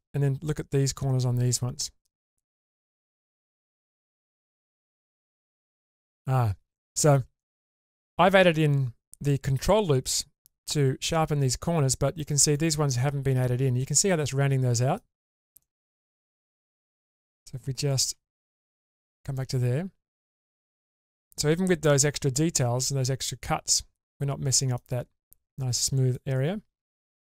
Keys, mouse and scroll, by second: 3.1 click, 4.6 click, 5.4 click, 6.7 middle click, 7.4 shift+middle click, 8.1-8.9 scroll up 2, 11.8-12.2 scroll down 2, 12.2 middle click, 13.8-15.0 middle drag, 15.3-15.9 scroll down 2, 15.6 middle click, 16.3 shift+space, 17.0 shift+space, 18.1 Tab, 19.3-20.2 middle drag, 20.3-20.8 scroll up 2, 20.8-24.7 middle drag, 25.1-25.7 scroll down 3, 25.7-26.2 middle drag, 26.5-27.2 scroll up 2, 26.9-27.2 middle drag.